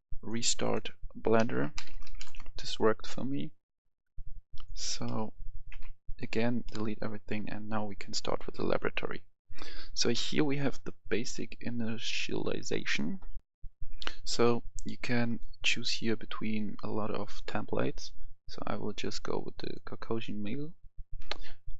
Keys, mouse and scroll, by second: 1.2-2.1 typing, 2.2 Return, 4.2 click, 4.9 middle click, 5.2 a, 5.4 a, 5.6 x, 6.0 click, 6.5 middle click, 7.7-11.2 drag, 13.3 F10, 15.2 click.